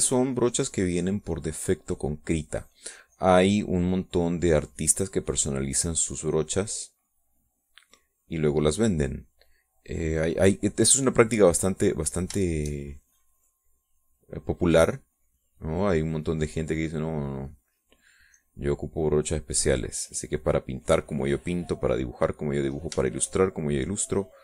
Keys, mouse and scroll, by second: 13.6 shift+click, 14.3-17.8 shift+drag, 17.9 click, 18.7 middle click, 19.6-23.8 drag, 23.9 click, 24.3-24.4 shift+drag.